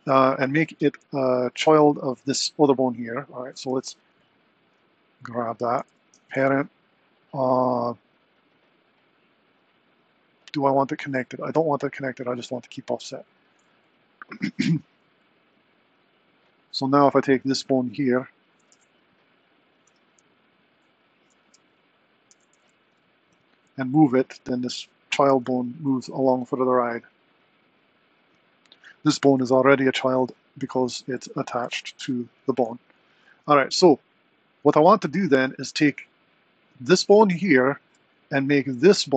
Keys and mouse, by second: 1.5 shift+click, 3.3 click, 3.7 r, 6.1 super+p, 13.1 click, 14.3 click, 14.7 r, 17.5 click, 18.0 click, 18.7 g, 21.4 Tab, 22.3 g, 24.6 click, 25.3 g, 28.8 click, 29.5 r, 31.6 g.